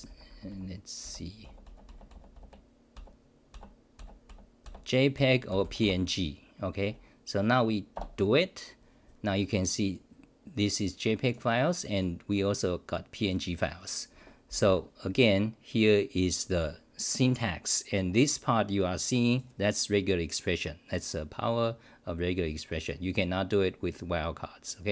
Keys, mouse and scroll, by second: 23.6 k.